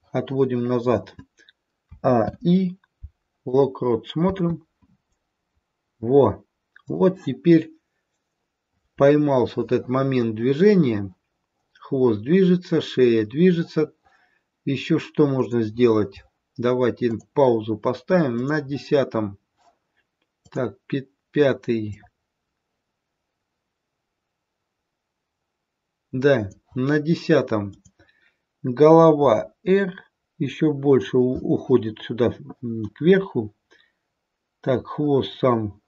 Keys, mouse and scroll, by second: 1.7 a, 2.2 i, 4.2 space, 6.8 click, 13.8 click, 15.4 click, 16.9 click, 18.3 click, 20.4 click, 21.9 click, 27.6 click, 29.2 r.